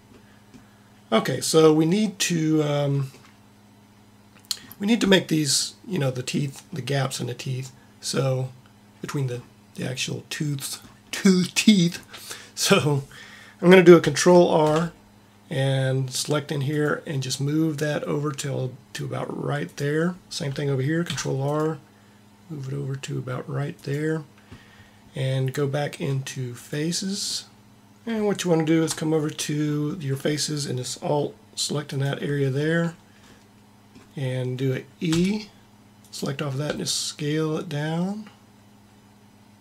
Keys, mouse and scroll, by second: 14.6 ctrl+r, 16.7 ctrl+r, 20.9 ctrl+r, 21.3 ctrl+r, 26.6 click, 27.7 ctrl+z, 35.0 e, 36.5 s.